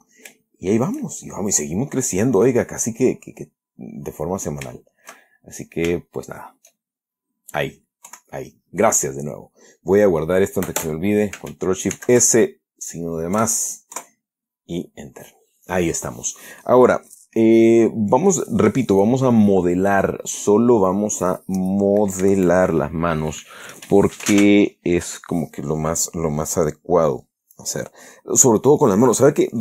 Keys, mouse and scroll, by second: 0.3-0.7 middle drag, 0.8 shift+middle click, 1.8-2.3 middle drag, 2.8 click, 3.3-4.9 middle drag, 5.0 shift+middle click, 7.1-7.8 shift+middle drag, 8.4 KP_1, 12.2 ctrl+shift+s, 13.7 KP_Add.